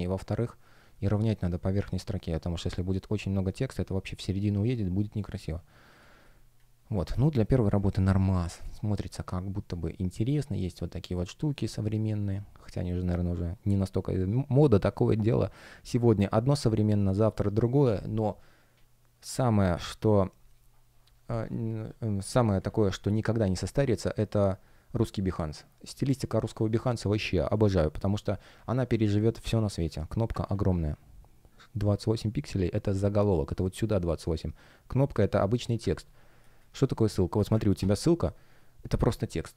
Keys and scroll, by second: 0.8 shift+p, 5.9 space, 9.2 shift+g, 11.6 space, 36.4 space.